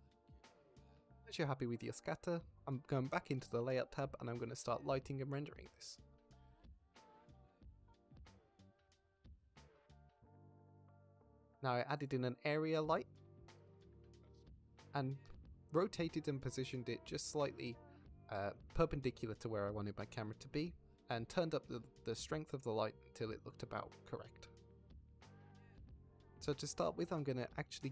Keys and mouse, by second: 0.0 ctrl+s, 0.6 shift+click, 1.1 shift+middle drag, 2.3 z, 3.5 click, 6.8 click, 8.6 click, 9.5 click, 10.1 click, 10.5 shift+click, 11.3 shift+click, 11.6 z, 12.2 shift+middle drag, 12.6 shift+a, 18.1 drag, 18.6 g, 19.4 r, 19.8 x, 20.7 g, 21.8-22.2 drag, 22.6 z, 23.4-23.7 drag, 24.9 shift+middle click, 25.1 shift+drag, 25.3 middle click, 25.9 middle drag.